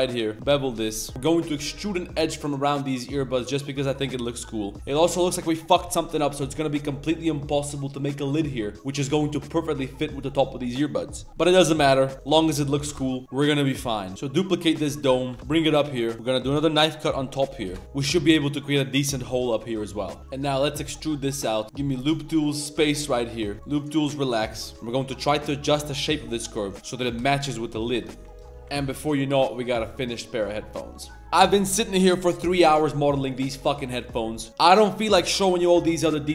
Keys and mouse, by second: 0.2 Tab, 0.2 ctrl+r, 0.2 middle click, 0.3 ctrl+shift+b, 1.1 middle click, 1.4 g, 4.5 middle click, 9.0 middle click, 9.3 middle click, 9.8 middle click, 10.3 middle click, 11.8 2, 12.8 ctrl+b, 14.1-15.4 typing, 17.8 middle click, 17.8 typing, 18.2 middle click, 18.6 middle click, 19.0 middle click, 19.3 middle click, 19.6 shift+middle click, 19.9 middle click, 21.6 2, 21.6 1, 21.6 w, 24.7 ctrl+z, 24.7 shift+s, 25.6 ctrl+z, 25.6 g, 27.2 shift+middle drag, 27.7 click, 28.0 shift+s, 28.3 ctrl+click, 28.5 shift+s, 28.7 Tab, 30.1 middle click, 30.4 a, 30.5 middle click.